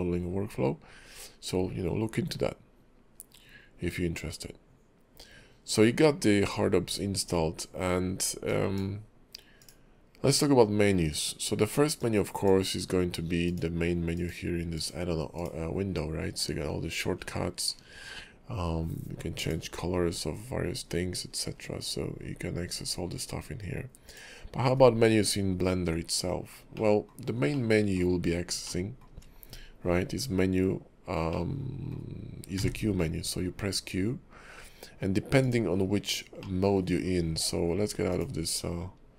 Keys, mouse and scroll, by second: 26.9 middle click, 27.7 middle click, 28.2-28.8 scroll up 3, 28.8 shift+middle click, 31.5 middle click, 32.5 q, 35.4 click, 35.9-36.5 scroll down 2, 36.5 shift+middle click, 37.2-38.1 scroll down 1, 38.1 click, 38.5 scroll up 3, 38.7-39.0 scroll down 1.